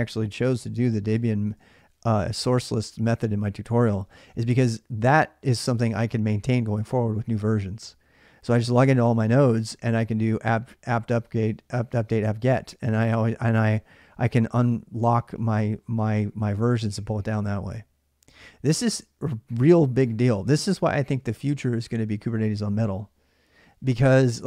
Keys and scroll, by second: 0.3 alt+Tab, 1.3 alt+Tab, 1.5 alt+Tab, 3.6 alt+Tab, 3.8 alt+Tab, 4.0 alt+Tab, 4.2 alt+Tab, 4.3 alt+Tab.